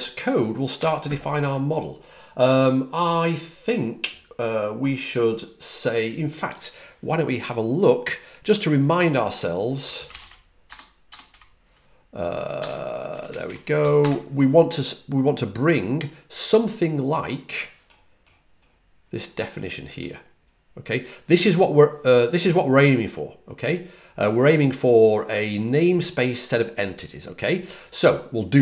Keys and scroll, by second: 9.8-13.9 typing, 18.5-19.5 typing, 28.1 typing.